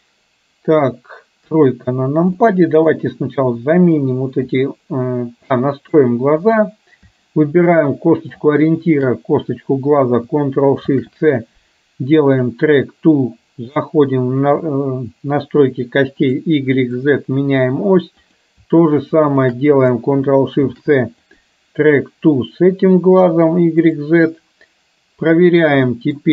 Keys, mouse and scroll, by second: 1.5 KP_3, 2.5-3.1 middle drag, 3.7 middle click, 4.6 click, 5.6 middle click, 6.6 click, 8.1 shift+middle click, 8.8 shift+click, 12.6 ctrl+shift+c, 13.8 click, 17.1 click, 18.3 click, 19.5 shift+click, 20.7 ctrl+shift+c, 23.3 click, 26.0 middle click.